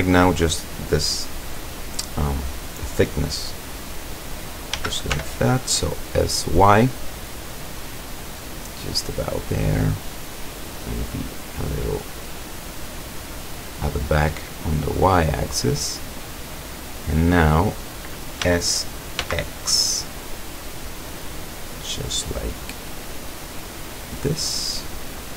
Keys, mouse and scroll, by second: 4.8 s, 5.2 y, 9.7 click, 10.9-12.6 drag, 13.3-14.3 drag, 15.2-17.9 drag, 18.5 s, 19.3 x, 24.2 click, 24.8-25.3 middle drag.